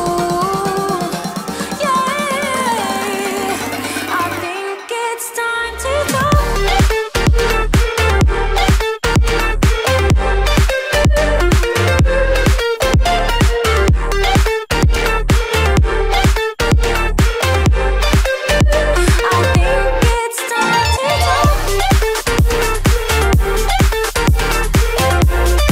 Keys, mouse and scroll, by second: 2.0 ctrl+g, 3.3-13.9 alt+shift+drag, 13.9 ctrl+z, 15.0-25.7 drag.